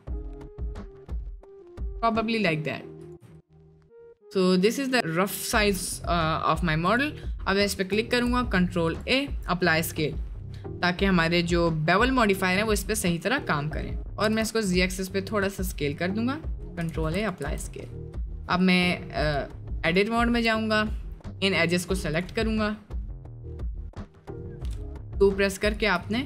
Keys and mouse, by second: 3.8-4.6 middle drag, 4.9 middle click, 6.6 middle click, 6.9 click, 7.9 ctrl+a, 9.6 click, 12.7-13.4 drag, 14.2 s, 15.9-16.7 drag, 17.0 ctrl+a, 17.4 Tab, 20.4 3, 20.8 click, 22.5 middle click, 24.5 2, 25.1 click, 26.1 middle click.